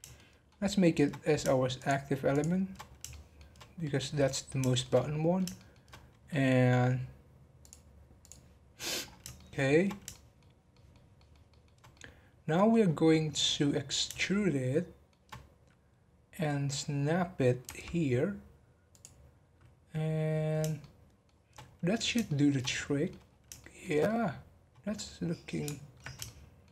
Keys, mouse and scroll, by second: 1.7 shift+click, 2.3 shift+click, 2.8 scroll down 4, 3.1 shift+middle click, 3.6 scroll down 1, 3.8-5.9 middle drag, 5.9 scroll up 1, 6.2-7.6 middle drag, 7.6-8.8 drag, 8.8 scroll up 5, 9.3 shift+middle click, 9.8 scroll down 4, 10.1-12.8 shift+middle drag, 12.8-13.2 scroll up 9, 13.4-17.2 middle drag, 20.3 scroll down 1, 20.8 shift+middle click, 21.6-22.3 scroll down 7, 22.3-23.3 shift+middle drag, 23.3 scroll down 3, 23.5-26.7 shift+middle drag.